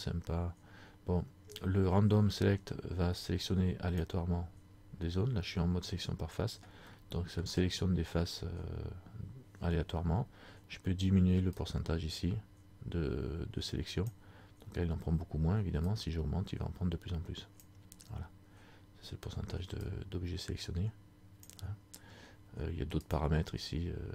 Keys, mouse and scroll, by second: 7.2 middle click, 11.7 click, 16.2 click, 20.0 click, 23.1 click.